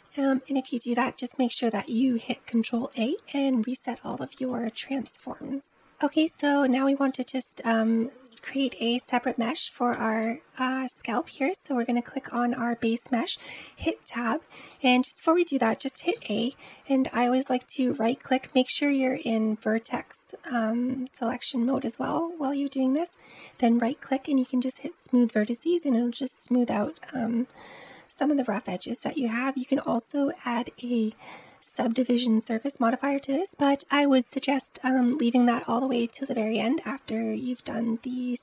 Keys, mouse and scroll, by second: 2.4 ctrl+a, 4.2 click, 4.9 ctrl+z, 5.8-6.1 scroll up 4, 6.1-7.2 middle drag, 7.2 click, 7.7-8.4 shift+middle drag, 8.4-8.8 scroll up 2, 8.8-10.6 middle drag, 10.6-11.2 scroll up 1, 11.2-12.2 middle drag, 12.2 click, 13.2 Tab, 14.6 middle click, 15.1-16.0 scroll down 2, 16.0 a, 17.3-20.4 right drag, 22.9-25.8 right drag, 33.4 Tab, 34.4-37.4 middle drag.